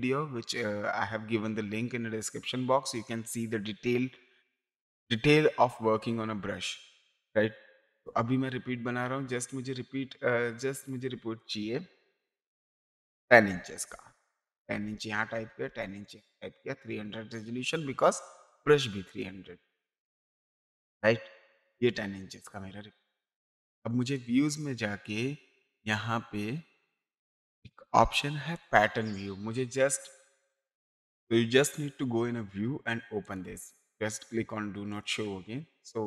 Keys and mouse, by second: 7.6 ctrl+n, 10.6 click, 13.5 KP_1, 13.9 KP_0, 14.6 Tab, 15.4 KP_1, 15.7 KP_0, 19.1 click, 24.0 click, 28.5 click, 33.2 click, 34.9 click.